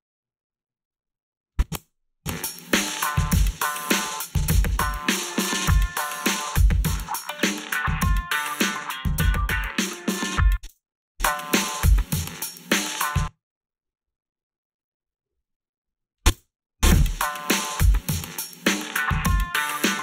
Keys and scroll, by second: 1.8 space, 10.3 space, 10.7 space, 13.0 space, 16.3 space.